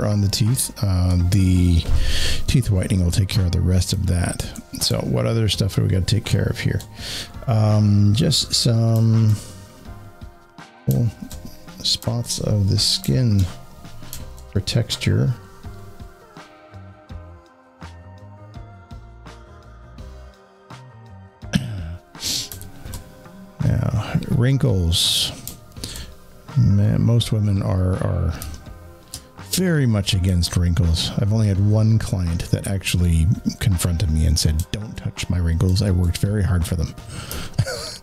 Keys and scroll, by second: 3.8 space, 3.9 space, 17.7 alt+space, 28.2 alt+space, 37.6 alt+space.